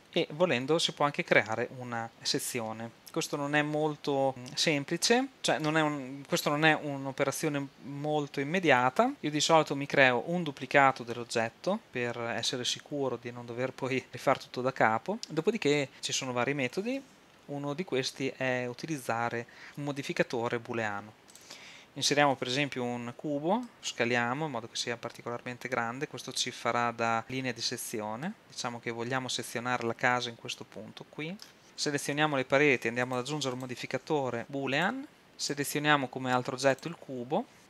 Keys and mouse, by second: 0.0 shift+z, 5.3-10.7 middle drag, 14.1-15.9 middle drag, 16.9 ctrl+Down, 22.4 shift+a, 24.0 s, 27.2-29.5 drag, 29.7 click, 36.9 click.